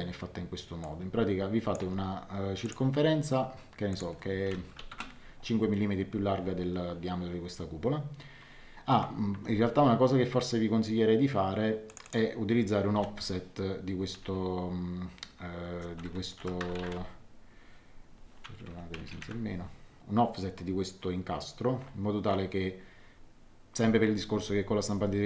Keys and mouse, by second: 0.8 click, 1.8 d, 2.6 click, 3.9 click, 4.7 KP_5, 4.9 Return, 4.9 KP_Enter, 9.3 Escape, 11.8 click, 12.9 o, 16.3 KP_Subtract, 16.6 KP_0, 16.7 KP_Decimal, 16.9 KP_2, 18.7 Home, 19.2 Delete.